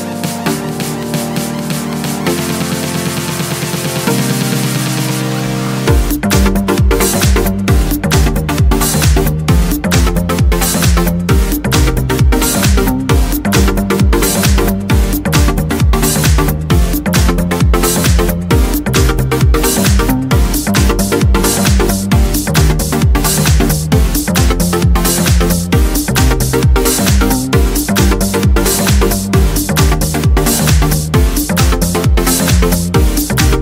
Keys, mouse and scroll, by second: 1.1 click, 3.2 click, 4.2 click, 5.5 click, 6.5 click, 8.1 click, 9.0 click, 10.2 click, 11.1 click, 11.7 click, 12.8 click, 13.9 click, 15.1 click, 16.8 click, 18.7-20.3 drag, 20.7 click, 21.6 click, 22.3 click, 23.2 click, 24.4 click, 25.4 click, 26.3 5, 26.7 click, 27.7 click, 28.6 click, 29.9 scroll down 2, 31.5 middle click, 31.7 click, 33.4 click.